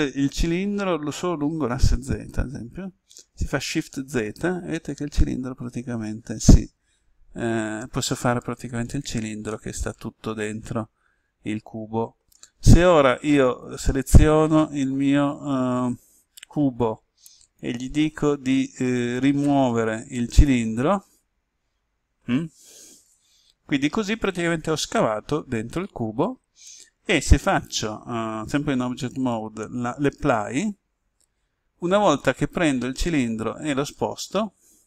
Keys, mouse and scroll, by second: 3.7 shift+z, 8.8 click, 9.5 middle click, 13.3-14.5 right drag, 17.5 click, 20.1-22.5 middle drag, 30.1 click, 32.1 right click, 34.2 click.